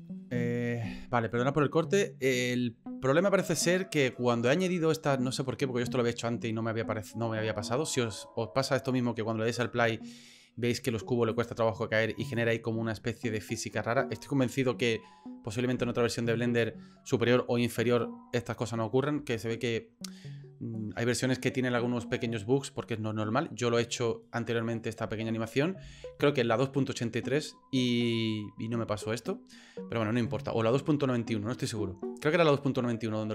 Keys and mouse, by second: 1.3-2.5 drag, 9.5 click, 11.3 click, 12.2 click.